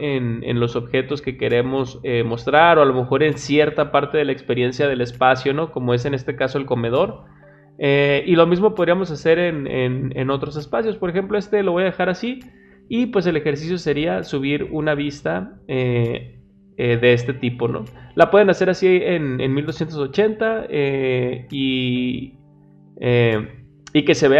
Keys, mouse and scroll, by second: 13.6 middle click, 13.6 scroll up 2.